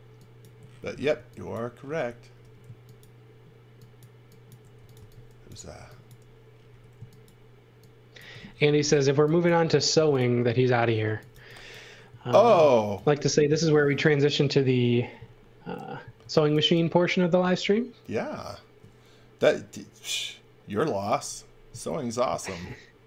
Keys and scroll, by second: 1.1 x, 2.4 e, 4.5-6.7 typing, 9.1-12.1 typing, 16.2 x, 16.5 v.